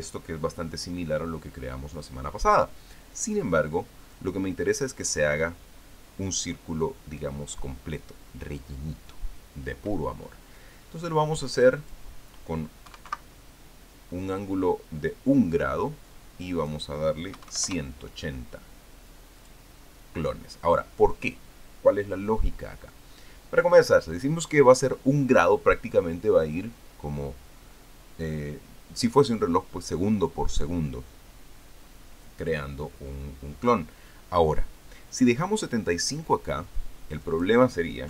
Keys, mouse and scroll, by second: 12.4 click, 13.7 KP_1, 13.9 KP_Decimal, 17.3 click, 18.1 KP_1, 18.3 KP_8, 18.4 KP_0, 20.2 click.